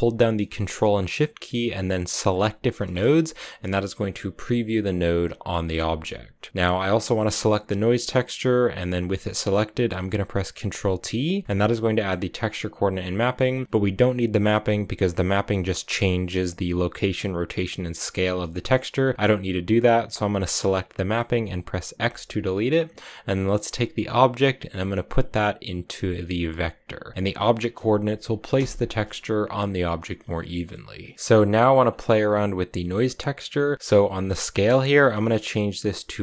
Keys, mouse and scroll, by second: 2.1 ctrl+shift+click, 5.5 scroll up 1, 6.2-10.1 drag, 11.2 ctrl+t, 11.4 middle click, 12.3 a, 12.5 click, 13.0-15.7 middle drag, 18.7-21.8 drag, 21.8 x, 22.5 click, 23.8-28.7 drag, 28.7-30.4 scroll up 2, 30.4 middle click, 30.9 scroll down 1, 31.0 middle click, 31.9 click, 34.6-36.2 drag.